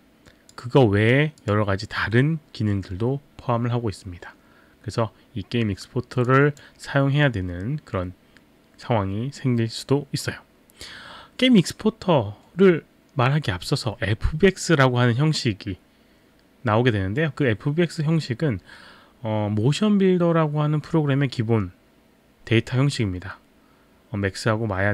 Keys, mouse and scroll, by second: 1.4 click, 6.2 click.